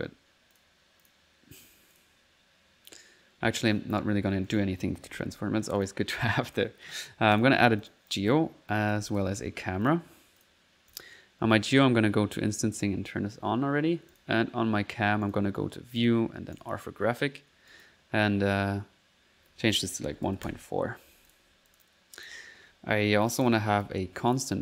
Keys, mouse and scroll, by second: 0.0-0.6 typing, 0.6 click, 1.1 click, 1.5 click, 4.5 right click, 4.8-5.5 typing, 5.8 click, 6.5 click, 7.4 click, 7.8 click, 8.7 click, 8.8-9.6 typing, 9.9 click, 10.4 click, 10.9 click, 11.8 click, 12.2 middle click, 12.8 click, 14.1 click, 15.3 click, 16.0 click, 16.2 click, 16.6 click, 17.7 click, 21.3-22.6 drag, 23.3 click, 23.9 c, 24.3 click.